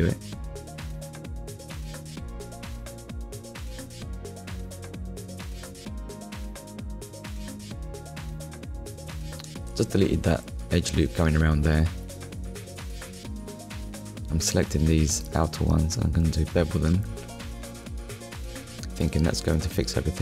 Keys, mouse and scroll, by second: 0.0 middle click, 5.7 Delete, 7.9 click, 9.2 middle click, 11.2 shift+click, 11.9 shift+click, 12.4 middle click, 13.1 shift+click, 13.6 middle click, 14.4 shift+click, 14.9 middle click, 17.7 click, 18.8 middle click, 19.9 click.